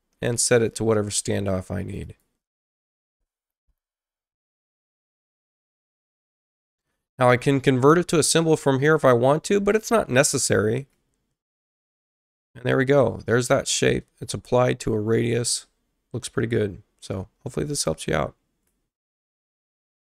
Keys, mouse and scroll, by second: 0.5 click, 1.8 click, 2.0 click, 2.9 5, 3.1 Return, 4.7 click, 5.8 click, 18.2 click, 18.2 right click, 19.9 shift+F2.